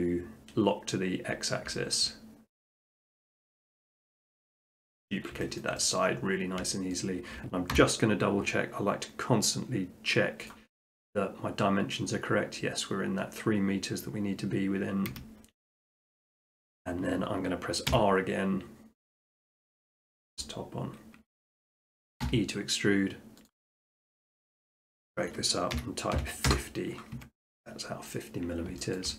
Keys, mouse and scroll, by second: 0.7 middle click, 0.9 middle click, 1.4 middle click, 2.0 shift+middle click, 3.6 click, 4.6 middle click, 4.9 middle click, 5.6 shift+middle click, 5.9 middle click, 6.2 middle click, 6.4 middle click, 6.7 shift+middle click, 6.9 shift+middle click, 7.8 t, 10.5 click, 15.1 Escape, 16.1 shift+middle click, 16.5 middle click, 16.7 scroll, 17.9 r, 18.9 click, 18.9 scroll, 19.9 click, 20.5 click, 21.8-23.0 middle drag, 22.3 e, 23.5-25.2 drag, 25.8-26.1 typing, 26.5 Return, 27.2 Tab, 28.1 middle click, 28.3 middle click, 28.5 middle click, 29.0 shift+middle click.